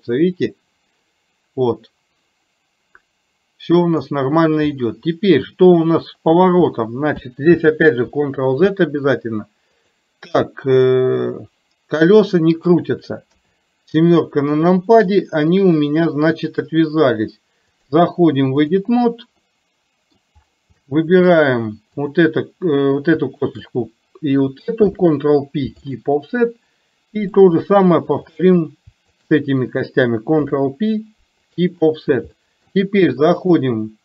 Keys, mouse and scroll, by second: 4.9-5.5 middle drag, 10.9-12.9 drag, 13.4 KP_7, 15.1 click, 15.4-16.7 drag, 17.9-18.9 drag, 19.5 middle click, 20.9 shift+middle click, 22.1 click, 26.6 middle click, 28.4 click, 32.5 middle click, 33.5-34.0 drag.